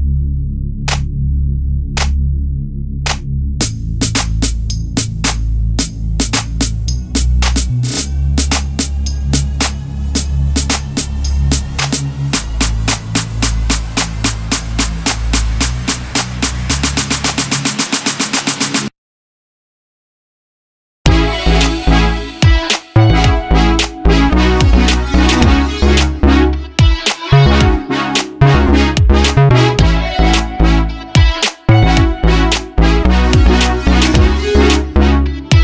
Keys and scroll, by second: 0.6 m, 5.2 space, 6.1 m, 8.5 space, 9.7 s, 11.8 space, 14.2 s, 15.0 m, 16.8 h, 19.0 m, 20.7 /, 21.1 5, 21.2 Return, 23.2 space, 26.1 space, 27.7 m.